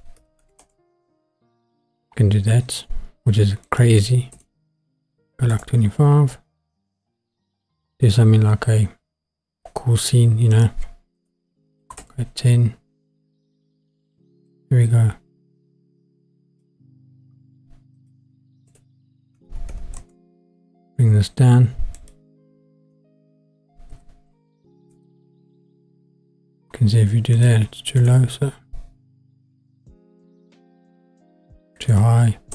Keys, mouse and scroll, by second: 3.7-5.6 drag, 10.5-12.0 drag, 14.5-16.6 drag, 18.0-20.0 drag, 22.0-24.9 drag, 27.4-30.3 drag, 31.9-32.5 drag.